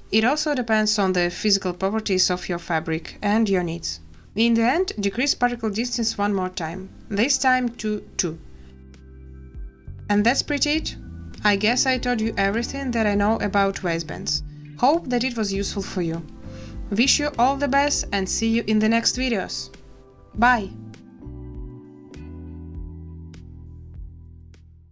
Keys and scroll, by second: 2.9 a, 6.9 2, 7.2 Return, 9.2 space, 13.5 shift+a.